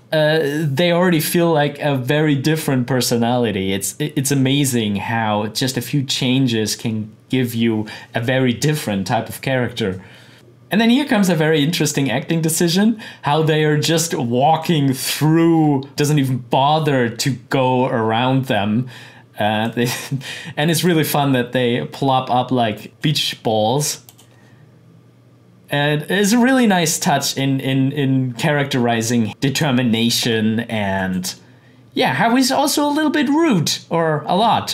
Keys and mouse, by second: 10.3 click, 14.6-15.9 drag, 19.6-24.1 drag, 26.9-30.9 drag.